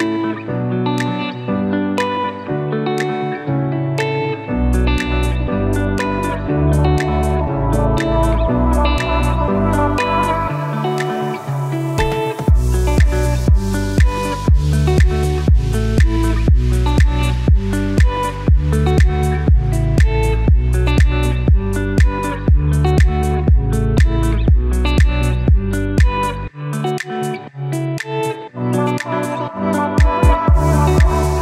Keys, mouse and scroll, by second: 5.7-7.6 alt+drag, 7.6 alt+right click, 8.6-16.5 drag, 16.5-18.6 alt+drag, 18.7-20.5 typing, 19.1 click, 19.4 click, 21.3 click, 24.8 right click, 26.2-31.4 drag.